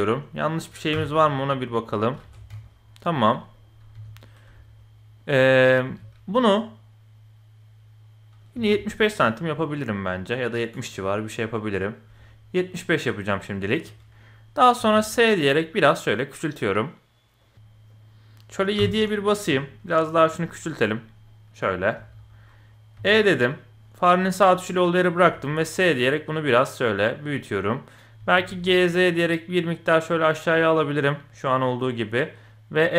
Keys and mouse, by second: 0.9 h, 1.1-2.0 middle drag, 2.2 ctrl+z, 2.5 KP_1, 3.1 middle click, 3.5 click, 3.9 KP_1, 4.6 shift+middle click, 5.9 g, 14.8 s, 18.8 KP_7, 19.4 s, 20.4 middle click, 21.2 middle click, 22.0 KP_1, 23.0 e, 24.2 middle click, 25.2 s, 27.5 middle click, 28.2 g, 30.6-32.3 middle drag.